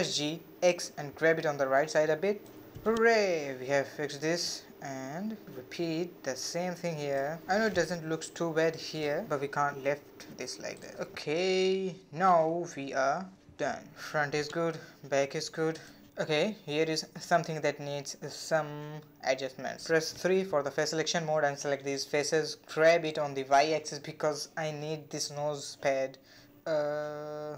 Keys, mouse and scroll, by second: 0.8 g, 3.2-4.8 shift+middle drag, 4.8-5.1 scroll up 2, 5.1 shift+middle click, 6.1 shift+click, 7.4 alt+click, 8.6 g, 11.0-12.0 scroll down 2, 12.0 a, 12.2 a, 12.8 Tab, 13.2 scroll down 2, 13.4-15.0 middle drag, 15.0-15.4 scroll up 3, 15.4-15.7 middle drag, 15.7 Tab, 16.0-16.4 scroll up 1, 16.4 shift+middle click, 17.3 click, 18.2 3, 18.5 click, 18.9 shift+click, 19.8 shift+click, 20.2-21.3 middle drag, 21.3 g.